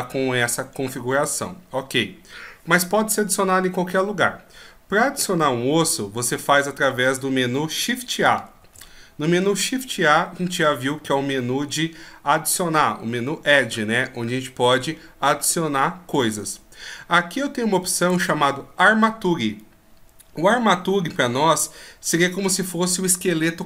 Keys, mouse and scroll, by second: 8.6 shift+a.